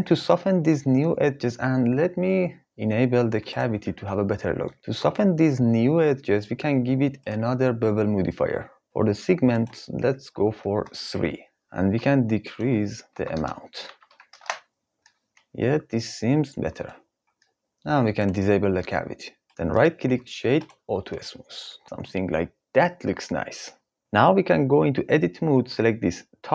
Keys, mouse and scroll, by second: 3.0-4.7 drag, 6.4-8.2 drag, 10.0-11.3 drag, 12.4-14.3 drag, 18.3-19.5 drag, 19.7 right click, 25.0 Tab, 26.1 3.